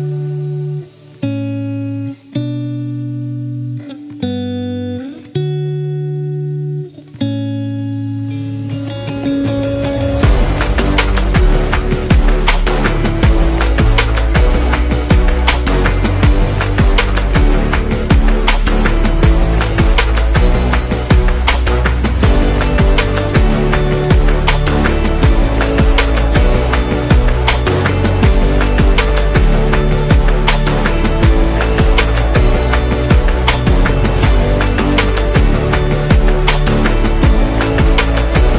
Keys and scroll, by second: 0.0-4.4 typing, 4.0 Return, 11.8-13.3 typing, 13.8 Page_Down, 14.2 Page_Up, 15.3 Page_Down, 16.3 Return, 22.2 space, 24.6 space, 29.1 super+-, 30.3 space, 32.8 z, 33.5 v, 38.4-38.5 typing.